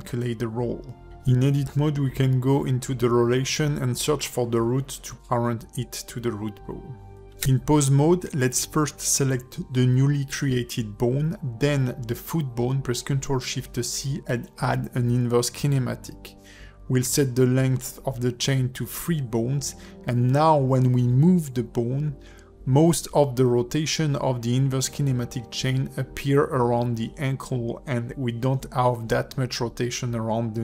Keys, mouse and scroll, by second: 1.1 o, 1.7 scroll up 1, 2.9 alt+p, 6.0 click, 6.5 click, 6.7 click, 7.7 o, 8.8 Tab, 9.1 click.